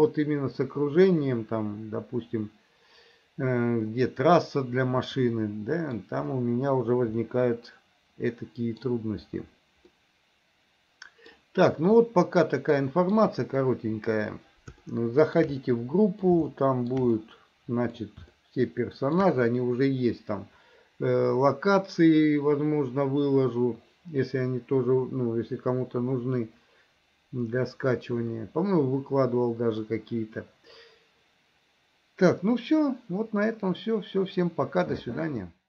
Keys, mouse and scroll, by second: 3.9-6.1 middle drag, 7.4-8.9 middle drag, 10.0-11.4 middle drag, 12.1-13.3 middle drag, 15.0 shift+middle click, 15.7 middle click, 16.6 shift+middle click, 17.2 middle click, 18.4 shift+middle click, 28.4-29.9 middle drag.